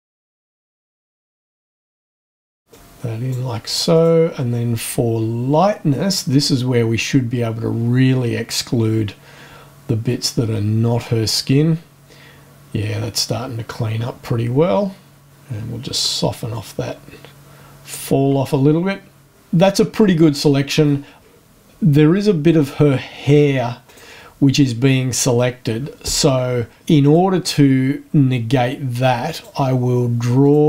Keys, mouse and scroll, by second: 0.2-2.5 drag, 2.7 click, 3.9 click, 6.4-16.1 drag, 16.5-18.1 drag, 23.8 click, 27.0 click, 29.3 click, 30.4 click.